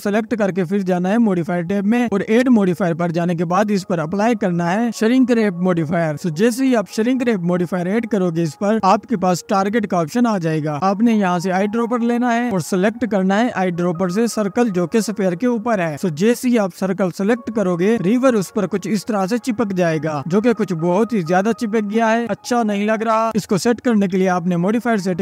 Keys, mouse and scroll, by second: 0.5 scroll up 3, 1.3 click, 2.0-5.0 drag, 9.3 click, 12.9 click, 13.7 middle click, 14.9 click, 17.6 click, 20.0-21.7 drag, 24.5-25.2 drag.